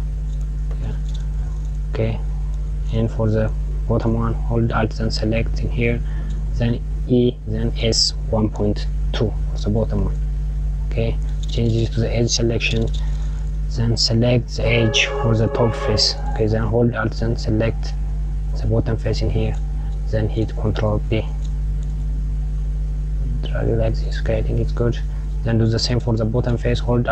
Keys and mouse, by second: 4.4 click, 6.2 e, 13.2 click, 16.7 alt+Left, 20.2 ctrl+b, 26.6 alt+Left.